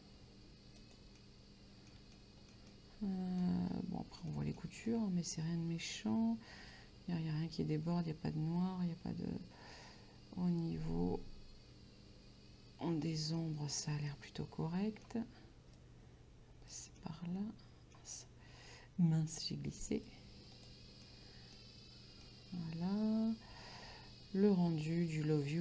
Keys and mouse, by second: 0.8 click, 1.2 middle click, 2.2 shift+middle click, 4.4 shift+middle click, 14.1 middle click, 15.8 right click, 17.0 middle click, 18.2 right click, 19.4 right click, 20.6 click, 21.1 middle click, 22.3 middle click.